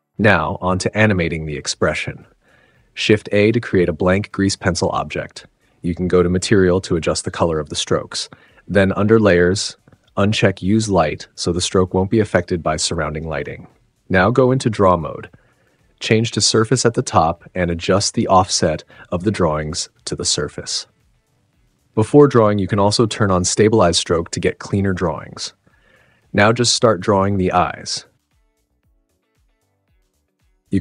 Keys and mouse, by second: 2.0 shift+a, 6.7 click, 6.9-7.8 middle drag, 7.9-11.7 middle drag, 11.9-13.2 middle drag, 15.1 middle click, 21.2 middle click, 22.1-24.9 middle drag, 25.5-26.6 middle drag, 26.7 shift+middle click, 27.0 middle click, 28.0-30.6 drag.